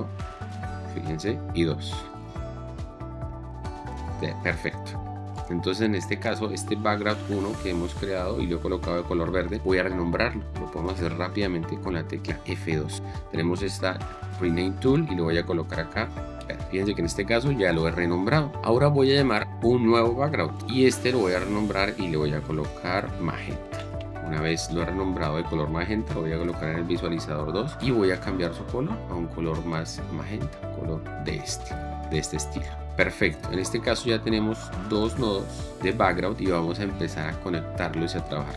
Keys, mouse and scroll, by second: 1.3 2, 3.3 1, 12.5 F2, 16.1 e, 16.3 d, 16.7 Return, 21.5 F2, 23.0-24.5 typing, 26.3 2, 32.3 click, 35.8 right click, 36.0 click.